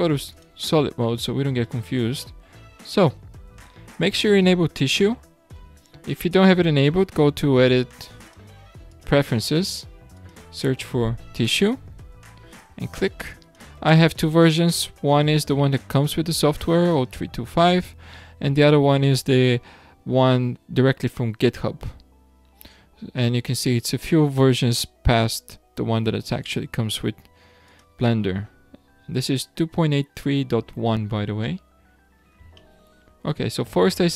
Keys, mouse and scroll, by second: 0.3 click, 1.0-1.6 scroll up 2, 1.6-5.2 shift+middle drag, 8.2-11.2 drag, 31.4-32.5 middle drag, 32.5 scroll down 1, 32.5-34.1 shift+middle drag.